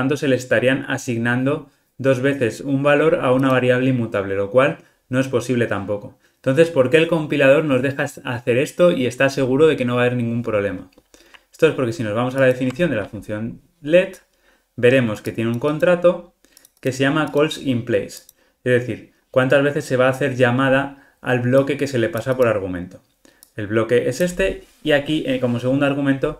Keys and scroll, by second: 12.5 super+b, 12.6 super+b.